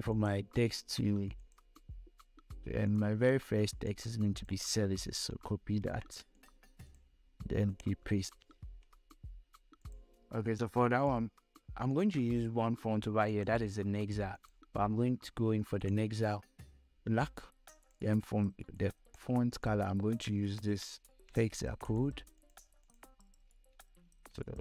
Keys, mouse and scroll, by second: 0.3-6.1 drag, 6.1 ctrl+c, 8.2 click, 8.4 ctrl+v, 10.1 click, 16.6-21.2 drag, 21.2 ctrl+c, 22.2 click, 23.2 click, 24.0 ctrl+v.